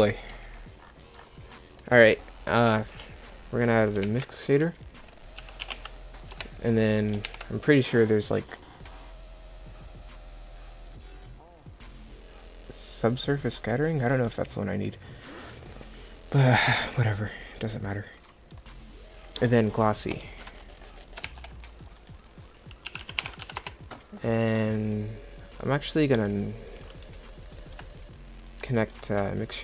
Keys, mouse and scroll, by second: 2.6 click, 4.1 shift+a, 7.3 shift+a, 20.2 shift+s, 21.3 shift+a, 23.4 s.